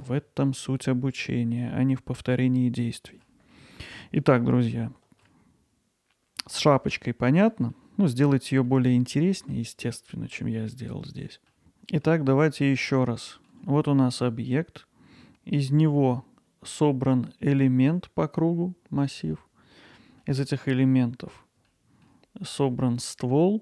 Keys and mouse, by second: 0.2-3.2 alt+middle drag, 3.5 middle click, 4.2 middle click, 4.7-5.2 ctrl+alt+middle drag, 6.7 middle click, 7.5 middle click, 8.7 alt+middle click, 9.2 middle click, 10.8 middle click, 11.6-12.1 alt+middle drag, 12.3-13.5 alt+middle drag, 19.4-19.9 alt+middle drag, 20.2 middle click, 21.7-22.1 alt+middle drag.